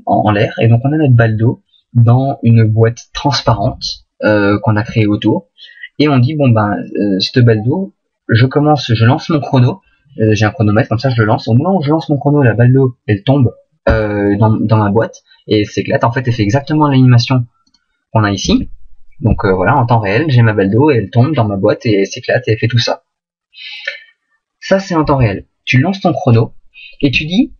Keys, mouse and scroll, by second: 17.7 click, 18.4 alt+a.